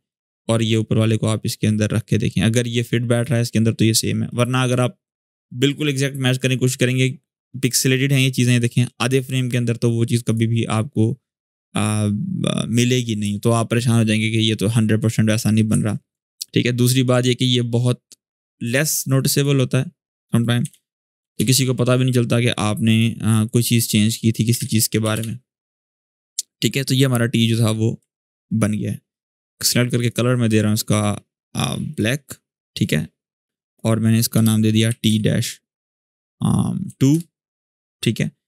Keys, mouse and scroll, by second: 0.8-3.3 drag, 10.0 click, 13.0 click, 13.5-15.3 ctrl+drag, 15.4 ctrl+z, 16.1-18.6 ctrl+drag, 19.1 click, 20.4-21.5 typing, 22.6 click, 24.2-25.3 typing, 27.7 Return, 27.8 alt+scroll down 1, 28.8 click, 34.1 Return, 34.6-35.2 typing, 36.6 2, 36.9 Return, 37.8-38.4 drag.